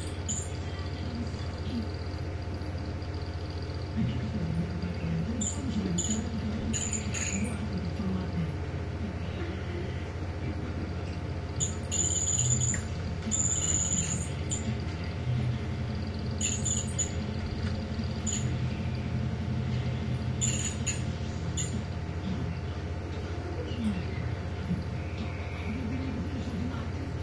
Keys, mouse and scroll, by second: 0.2 click, 1.3 click, 2.7 click, 5.2 click, 8.0 click, 11.2 click, 13.6 ctrl+shift+g, 14.6 click, 15.4 click, 18.3 ctrl+shift+g, 19.2 ctrl+shift+click, 19.9 click.